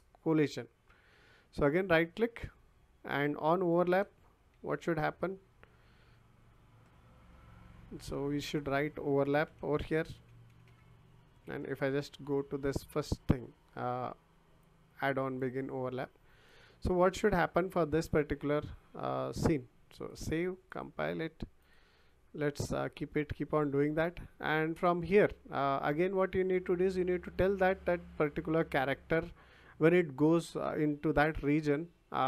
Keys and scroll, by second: 3.9 o, 4.5 n, 9.4-11.2 typing.